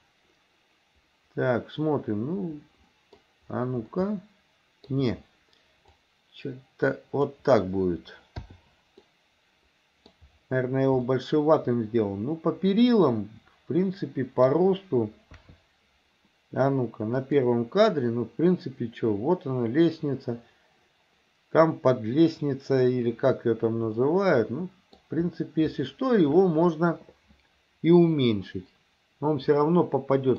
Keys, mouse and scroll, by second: 3.9 shift+middle click, 6.1-7.4 drag, 9.1-10.2 middle drag, 11.1-14.5 middle drag, 15.4 KP_3, 17.3 click, 24.0-25.0 middle drag, 29.6 middle click.